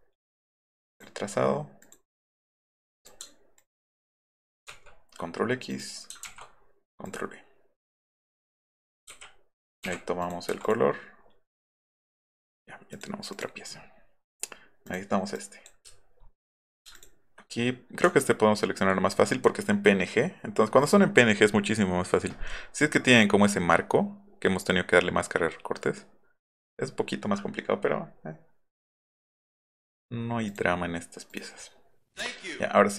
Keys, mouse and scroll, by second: 0.8 click, 1.8 click, 3.0 drag, 3.6 ctrl+click, 4.7 ctrl+x, 5.7 click, 6.3 ctrl+v, 7.0 click, 8.1 click, 9.8 i, 10.2 click, 10.5 v, 10.6 click, 11.9 click, 12.0 Escape, 12.9 click, 13.3 click, 14.9 click, 15.3 click, 15.9 alt+scroll up 1, 16.6 click, 16.9 ctrl+click, 18.2 ctrl+click, 24.5 click, 30.5 click, 31.3 click.